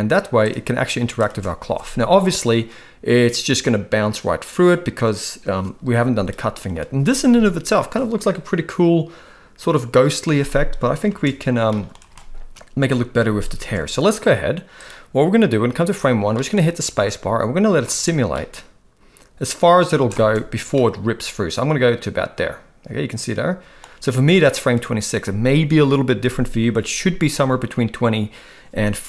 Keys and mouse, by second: 0.4-1.2 drag, 1.2 space, 11.0 space, 11.7-12.5 shift+middle drag, 12.5 space, 13.5 space, 14.8-15.9 drag, 16.3 middle click, 16.9 space, 18.2 space, 18.3-19.8 middle drag, 19.9 space, 20.2 space, 20.7-23.8 middle drag.